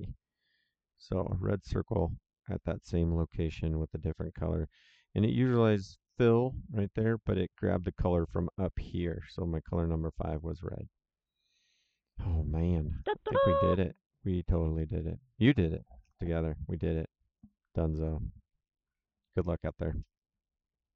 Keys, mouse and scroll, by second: 1.0 click, 12.9 click, 14.9 click.